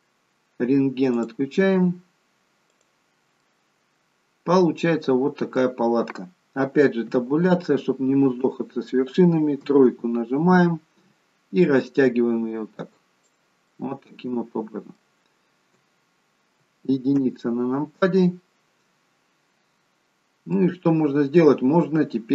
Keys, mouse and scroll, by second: 1.1 click, 3.3 middle click, 7.4 Tab, 9.5 KP_3, 11.4 click, 13.7 middle click, 17.2 KP_1, 18.5-19.4 scroll up 1, 19.4-20.1 scroll up 1, 20.4 middle click, 21.4-22.1 scroll down 1, 22.1 middle click.